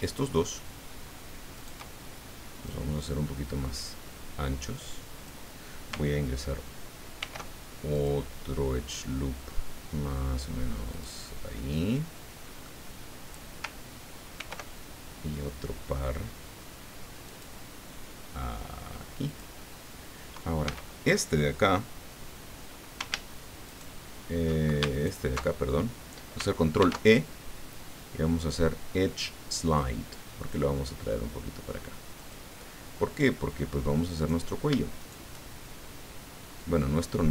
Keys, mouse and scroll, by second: 0.0 shift+right click, 1.5 shift+right click, 2.7-5.4 drag, 7.2 ctrl+r, 7.9 click, 10.9 click, 11.4-12.8 drag, 14.3 ctrl+r, 16.7 scroll up 2, 17.3 click, 19.2 click, 20.6 a, 23.7 ctrl+shift+right click, 24.9 ctrl+alt+shift+right click, 26.8 ctrl+e, 29.6 click, 32.2 click, 34.2 right click, 35.0 shift+right click, 36.6-37.3 drag.